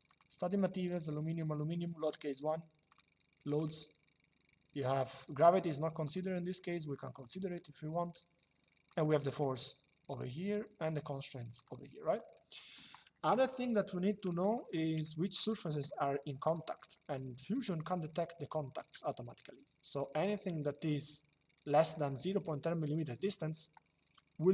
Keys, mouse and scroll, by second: 1.7 click, 5.7 click, 6.9 click, 8.6 click, 10.6 click, 13.2 shift+middle click, 15.6 shift+middle click, 19.9 click.